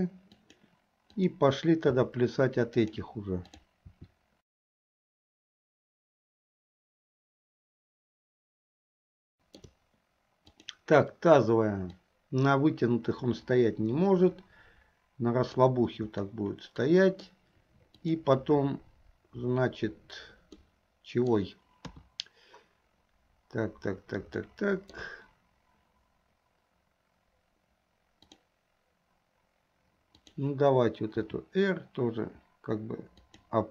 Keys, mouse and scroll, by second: 1.5 click, 2.0 r, 3.5-4.0 drag, 4.0 r, 8.3-8.9 shift+middle drag, 12.3-15.7 drag, 16.3-17.5 middle drag, 18.1 click, 20.7-21.5 middle drag, 22.0 KP_3, 24.6 shift+middle click, 28.3 click, 30.3 click, 31.4 r.